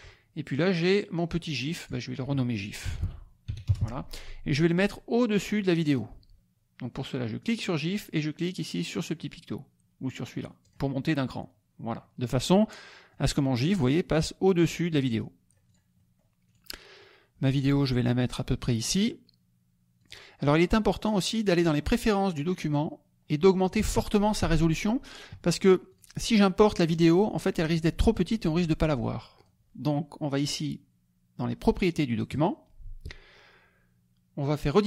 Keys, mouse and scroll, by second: 0.7-2.0 drag, 3.0 i, 3.6 Return, 5.9 click, 7.4 click, 10.6 click, 13.1-15.9 drag, 16.0 middle click, 16.3 click, 16.9-20.2 drag, 21.0 click, 25.9 click, 29.4 click, 32.3 click, 34.7 click.